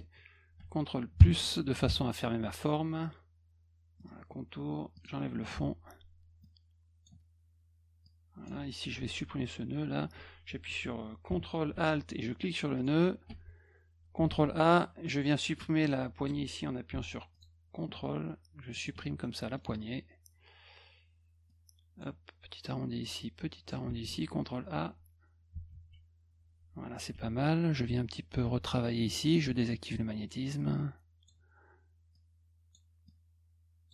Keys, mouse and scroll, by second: 4.0 middle click, 5.0 click, 5.5 F2, 6.4 click, 8.0 click, 12.8 ctrl+alt+click, 14.3 ctrl+a, 17.3 ctrl+click, 18.7 ctrl+click, 19.2 middle click, 21.5 click, 23.2 click, 24.0 ctrl+a, 25.7 shift+s, 27.1 F1, 27.8 F2, 29.4 click, 30.4 click, 32.1 click, 33.1 click.